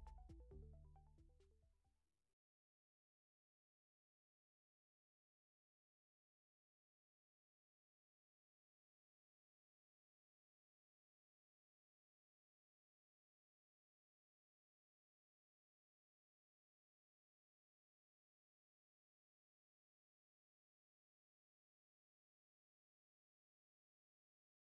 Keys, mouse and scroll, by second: 0.1 Home, 0.8-1.1 scroll down 1, 1.1 click, 1.5 0, 2.0 middle click, 2.7-3.0 scroll up 2, 3.0-4.0 middle drag, 4.0 z, 5.7-13.8 drag, 13.8 z, 21.9 click, 22.6 KP_Decimal, 23.1 KP_Decimal, 23.6 scroll down 1, 23.6-24.2 scroll up 21, 24.2-24.5 middle drag, 24.5 scroll down 1, 24.6 scroll up 1.